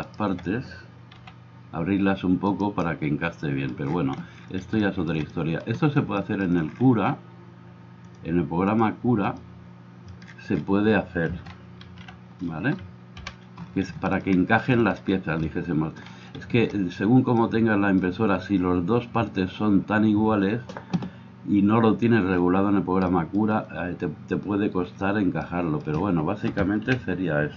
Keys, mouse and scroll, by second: 1.1 g, 11.9 alt+h, 13.2 KP_1, 26.9 KP_1.